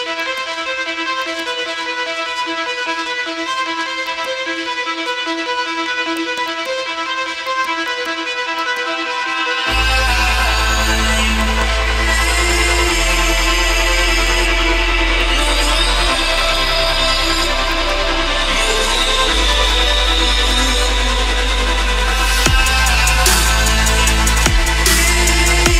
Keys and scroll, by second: 14.9 g.